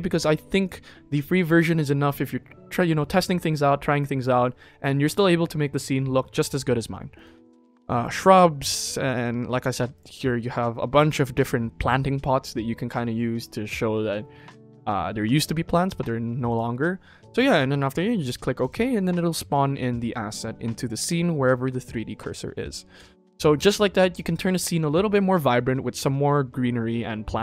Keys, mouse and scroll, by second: 0.0-7.6 drag, 7.9-18.6 drag, 22.9 n, 23.8 ctrl+s.